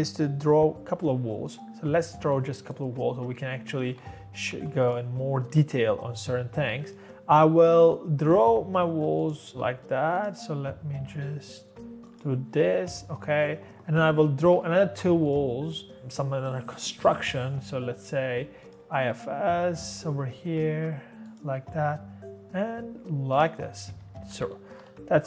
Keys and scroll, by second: 3.7-5.0 typing, 8.2 Escape, 8.4 Escape, 9.3-10.0 typing, 11.2 space, 12.5 Escape, 12.7 Escape, 14.4-15.1 typing, 23.9 Escape, 24.0 Escape, 24.3 Escape, 24.4-25.2 typing.